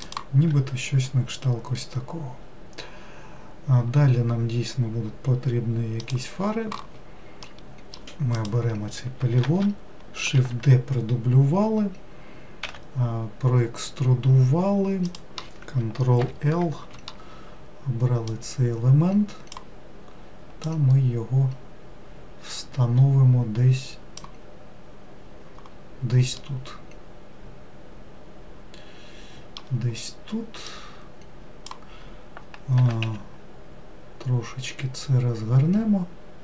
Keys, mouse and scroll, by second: 7.5 middle click, 8.4 click, 9.5 shift+d, 12.7 e, 16.2 ctrl+l, 18.3 click, 20.7 click, 26.4-29.6 middle drag, 30.7 click, 32.8 r.